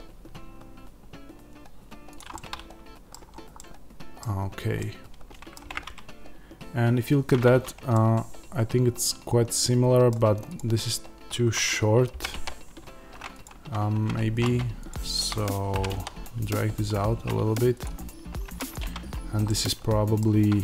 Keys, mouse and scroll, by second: 2.1 click, 2.2-5.6 middle drag, 3.2 scroll up 1, 4.2-4.7 scroll down 1, 7.4-10.4 middle drag, 10.4 click, 12.0 g, 13.3 click, 13.8 Tab, 14.3 click, 15.6 g, 17.7 click, 18.3 Tab, 18.5 click, 18.7 Tab, 19.4-20.6 middle drag, 20.1-20.6 scroll down 2.